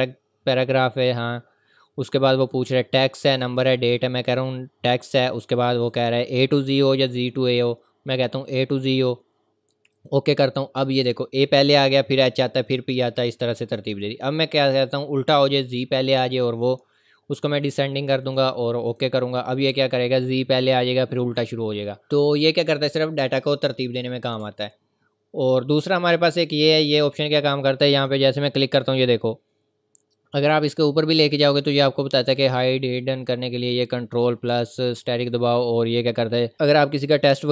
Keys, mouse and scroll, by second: 8.5 click, 14.0 click, 18.2 click, 24.4 ctrl+Num_Lock, 24.5-24.9 scroll down 1, 25.4 scroll up 1, 27.9 click.